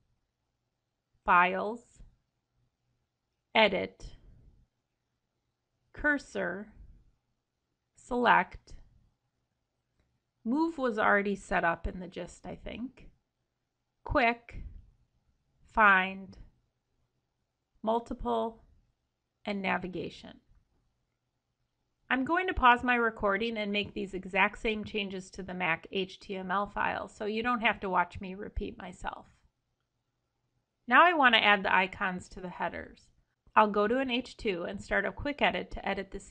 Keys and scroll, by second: 3.3 ctrl+b, 5.3 ctrl+b, 8.1 ctrl+b, 12.4 ctrl+b, 14.9 ctrl+b, 17.3 ctrl+b, 19.7 ctrl+b.